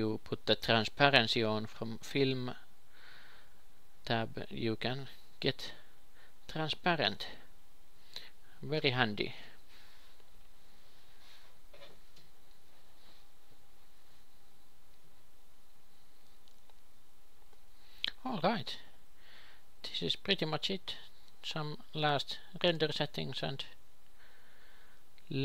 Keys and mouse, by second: 11.1 p, 11.8 ctrl+p, 13.5 g, 21.8-23.5 drag, 23.5 alt+z.